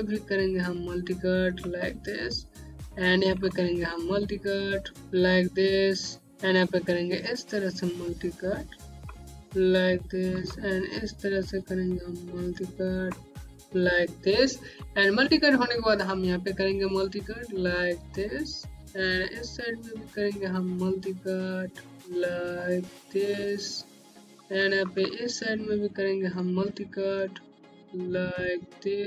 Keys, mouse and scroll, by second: 3.3 click, 7.1 click, 10.3 click, 10.4-11.1 typing, 14.8 z, 16.0 click, 18.1 right click, 21.9 click, 23.2 right click, 27.8 click.